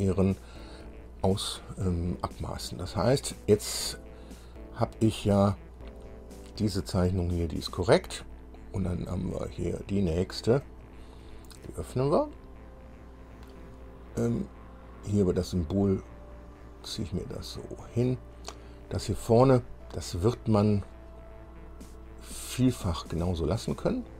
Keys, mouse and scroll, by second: 6.3 click, 10.2 click, 10.8 click, 13.0-13.4 scroll up 1, 16.0 click, 17.4-17.8 scroll up 1, 18.0 scroll up 1, 21.1 scroll up 2, 21.6 scroll up 2, 22.8-23.2 scroll down 2.